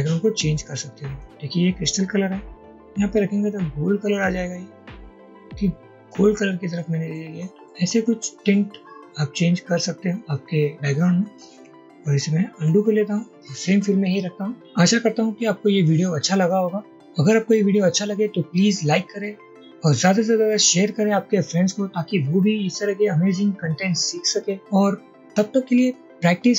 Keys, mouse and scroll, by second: 11.6 Escape, 12.6 ctrl+z.